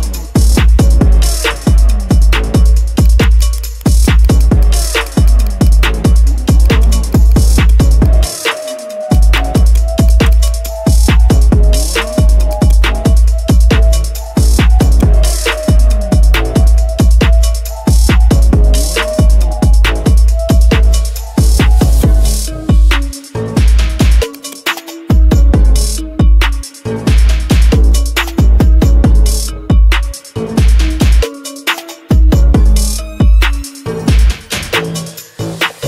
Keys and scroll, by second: 11.6 ctrl+z, 26.5 ctrl+Return, 32.0 ctrl+shift+i.